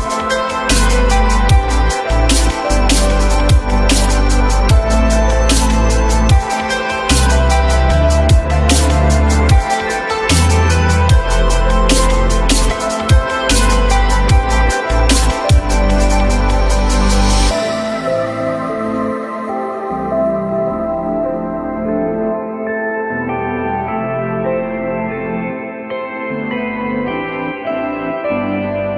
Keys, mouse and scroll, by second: 0.6 F3, 1.7 alt+middle click, 4.1-5.0 typing, 17.0 q, 18.1 alt+middle click, 18.5 alt+middle click, 18.8 F3, 20.4 alt+middle click, 24.2 alt+middle click, 26.3 alt+middle click, 26.6 alt+double middle click.